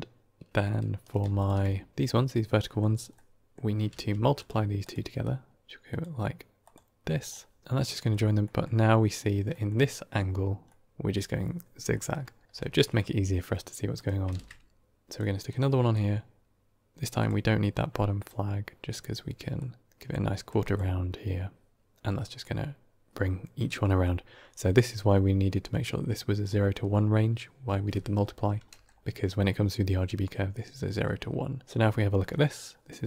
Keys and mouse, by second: 1.3 ctrl+shift+click, 2.5 middle click, 3.0-3.4 middle drag, 3.8 q, 5.1-5.6 drag, 5.8-6.6 drag, 7.2 middle click, 7.6 middle click, 8.3 middle click, 9.4 middle click, 10.6 middle click, 11.8 middle click, 14.2 shift+d, 15.4-15.8 drag, 17.1 click, 18.0 click, 19.4-20.0 drag, 20.3 click, 23.7 middle click, 25.7 click, 32.2 middle click, 32.8-33.0 drag.